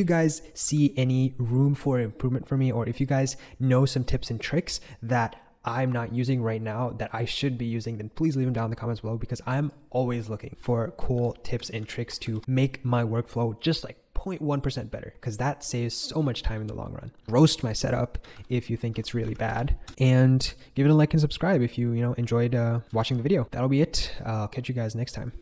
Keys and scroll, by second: 0.6 shift+super+e, 10.5 ctrl+super+j, 11.1 k, 11.8 super+k, 18.3 ctrl+super+k, 19.3 ctrl+super+j, 19.5 ctrl+super+k, 22.6-23.4 typing.